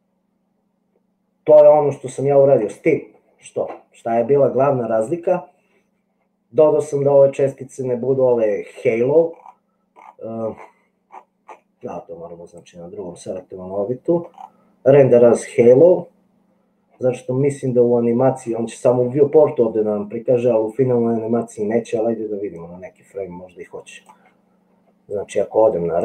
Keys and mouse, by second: 22.9-24.2 drag.